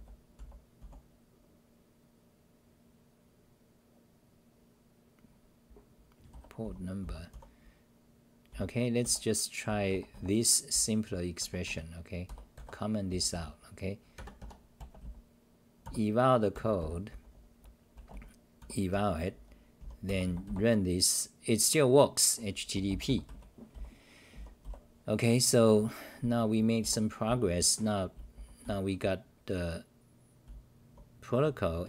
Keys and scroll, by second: 0.0-1.3 typing, 6.1-13.3 typing, 17.1-20.3 typing, 23.3 w, 23.7 c, 24.3 w, 24.6 c, 26.0-26.4 scroll up 4, 26.6-31.8 typing.